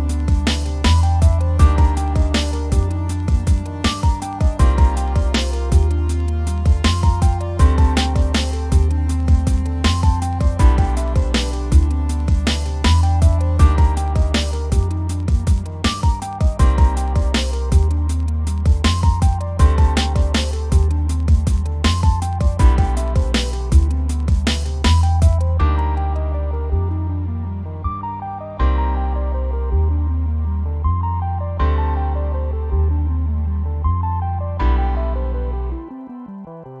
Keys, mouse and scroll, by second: 0.5-2.7 middle drag, 2.7 click, 2.8 middle click, 3.1 scroll down 2, 3.2 click, 3.3 middle click, 3.7 scroll up 2, 3.9 middle click, 4.1 click, 4.8 click, 5.7 middle click, 6.0 scroll up 2, 6.1-8.0 shift+middle drag, 8.0-8.6 scroll up 2, 8.3 middle click, 8.6-10.1 shift+middle drag, 10.1 click, 10.9 middle click, 11.2-12.3 drag, 12.3 scroll down 1, 12.6-15.7 drag, 15.7 scroll up 1, 15.9 click, 16.6 scroll down 1, 16.8-17.1 scroll up 2, 17.0 click, 17.1 click, 17.3-18.4 scroll down 1, 18.4-21.4 drag, 21.4 shift+middle click, 21.5 scroll up 1, 21.7 click, 22.1 scroll down 2, 22.3 scroll up 1, 22.5 click, 22.8 shift+middle click, 22.9 click, 23.5 scroll down 1, 23.7-24.7 drag, 24.7 shift+middle click, 24.8 scroll up 1, 24.9-26.3 middle drag, 26.3 scroll up 2, 26.8 click, 27.0 middle click, 27.5 click, 27.9 scroll down 2, 28.4 middle click, 28.7-30.0 drag, 30.0 middle click, 30.2 click, 30.9 scroll down 1, 31.0 shift+middle click, 31.6 click, 31.7 f, 32.0 middle click, 32.2 click, 32.6 shift+middle click, 32.7 click, 33.4 shift+middle click, 33.5 click, 34.0 shift+middle click, 34.2 click, 35.0-36.2 middle drag, 36.2 scroll up 1, 36.3 click, 36.4-36.8 scroll down 2, 36.5 click.